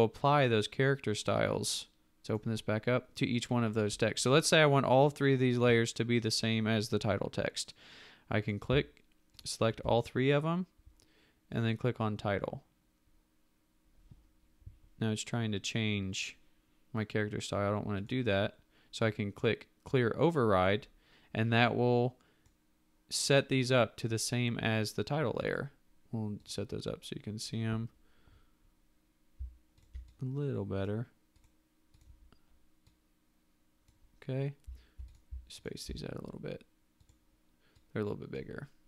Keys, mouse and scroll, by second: 9.4 shift+click, 29.8 ctrl+click, 35.6 shift+click.